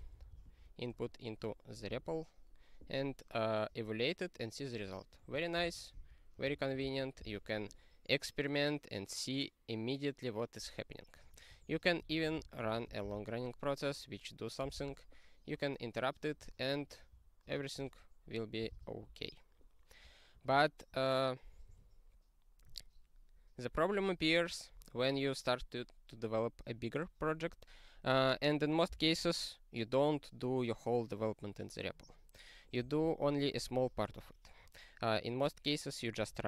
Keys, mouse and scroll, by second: 0.0-1.0 typing, 5.1 click, 5.5 ctrl+space, 5.6 ctrl+p, 5.9 alt+w, 6.4 super+o, 6.8 ctrl+y, 7.1 Return, 11.2 click, 11.7 ctrl+=, 12.0 alt+w, 12.3 super+o, 12.7 ctrl+y, 13.0 Return, 14.7 ctrl+c, 18.7 ctrl+q, 20.3 super+f, 21.7 ctrl+n.